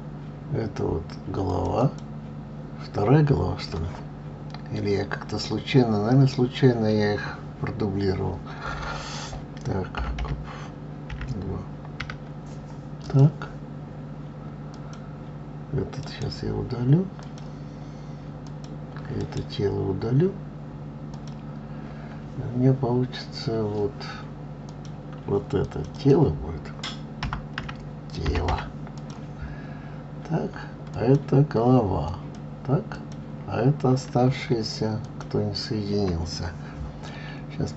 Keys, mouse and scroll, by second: 1.8 click, 2.1-5.1 drag, 15.1 click, 16.3-18.7 right drag, 18.7 click, 19.5-22.5 right drag, 25.0 click, 25.9 click, 26.3-29.3 drag, 31.2 click, 32.4 click, 33.2 click, 35.3 shift+click.